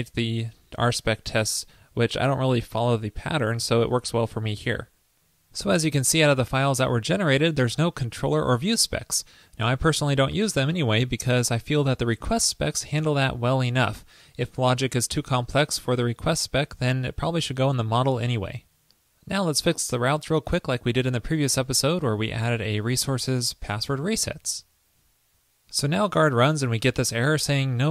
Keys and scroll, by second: 23.0 super+v, 24.4 super+s.